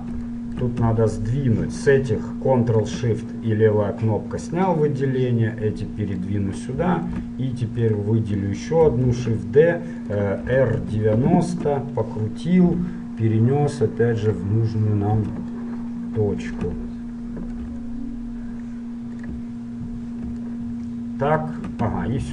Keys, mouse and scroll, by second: 1.9-3.8 drag, 4.6-6.5 drag, 7.2-10.0 right drag, 9.4 shift+d, 10.5 r, 13.0 g, 14.8-15.8 middle drag, 17.9 g, 19.2-20.7 middle drag.